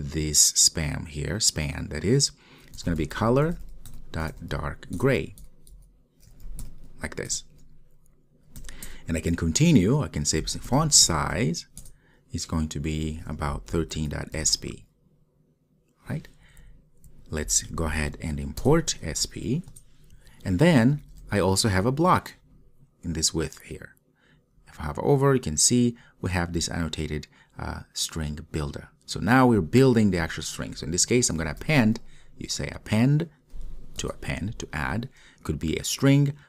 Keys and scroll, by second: 7.4 Return, 11.9 Return, 18.7 alt+Return, 34.1 Return.